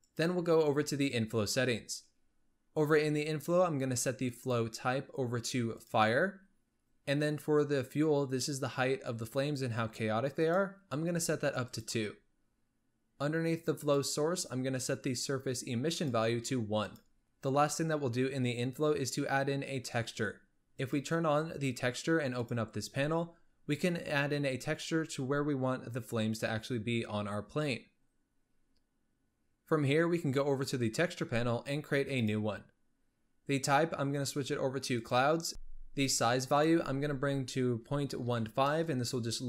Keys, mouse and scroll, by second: 0.0 click, 4.2-6.8 drag, 10.3-11.7 drag, 13.7-15.5 drag, 15.9 click, 17.2 scroll down 6, 20.6 click, 21.4 scroll down 4, 22.2-22.6 drag, 22.6-23.4 scroll down 8, 30.6 click, 32.0-35.5 drag, 35.5 BackSpace, 36.4-39.4 drag.